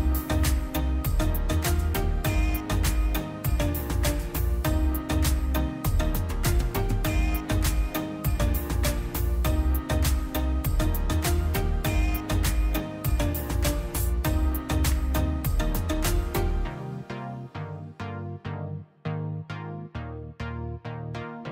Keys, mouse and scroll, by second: 4.7 click, 8.6 click, 12.8 click, 16.7 click, 20.3 click, 20.4 click.